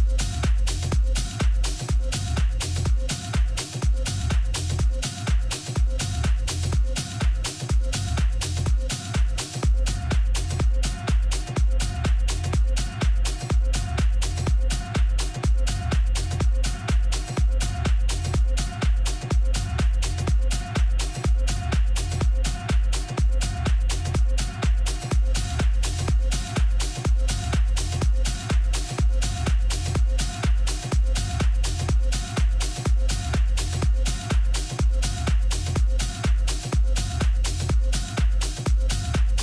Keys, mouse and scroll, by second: 2.8 KP_7, 4.0-7.8 middle drag, 7.8 a, 10.3-12.2 right drag, 11.5 Tab, 12.1 a, 12.5 a, 13.8-15.7 right drag, 14.5 a, 15.2 z, 15.8 z, 16.2-17.4 middle drag, 17.7 z, 18.8 a, 19.1 a, 20.1 b, 21.5 b, 22.8 middle click, 23.8 KP_7, 28.3-32.6 drag, 36.1-38.0 drag.